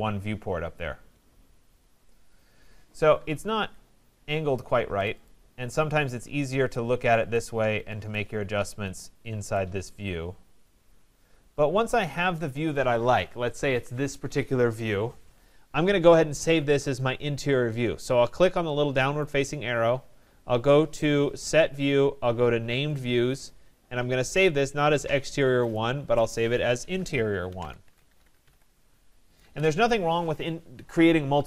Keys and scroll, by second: 3.5 Escape.